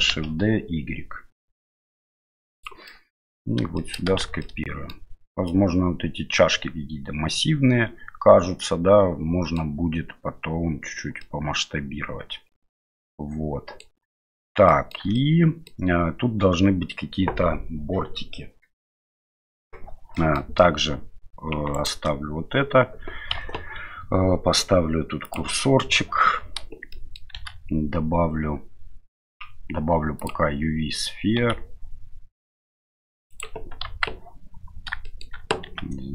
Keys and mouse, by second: 3.0-3.4 middle drag, 3.8 shift+middle click, 4.2 shift+z, 4.5-4.9 middle drag, 5.5-9.6 middle drag, 11.3-13.8 middle drag, 14.8 shift+middle click, 15.2-15.7 middle drag, 20.2 middle click, 21.7 right click, 23.4 KP_Divide, 25.3 click, 25.8 KP_7, 26.9-27.2 shift+middle drag, 27.3 shift+a, 31.4 s, 33.8 KP_1, 35.1 shift+middle click, 35.7 s.